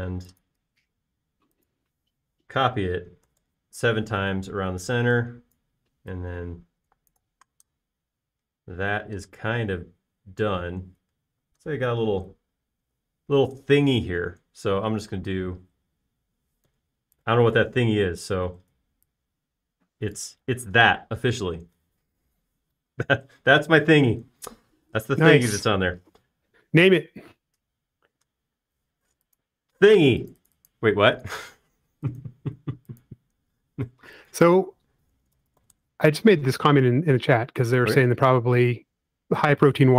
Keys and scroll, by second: 3.5 7, 4.2 x, 4.4 Return, 5.4 e, 18.0 f, 19.7 typing, 21.5 typing, 36.0-37.1 typing.